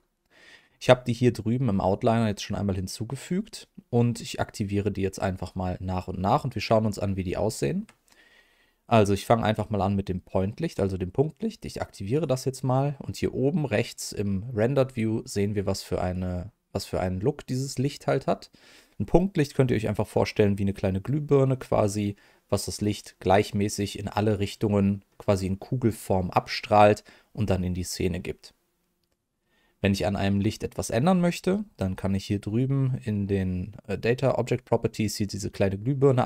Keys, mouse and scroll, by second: 6.5 middle click, 7.5 shift+middle click, 12.1 click, 18.9 middle click, 24.2 middle click, 30.3-33.3 middle drag, 35.9 click.